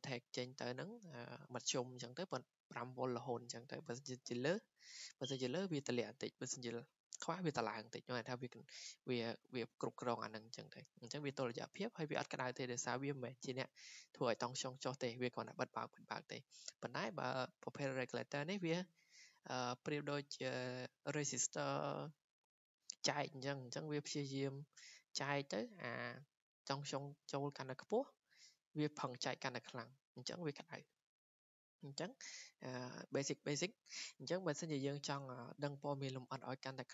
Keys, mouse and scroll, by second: 16.7-21.8 drag, 31.4-36.5 drag.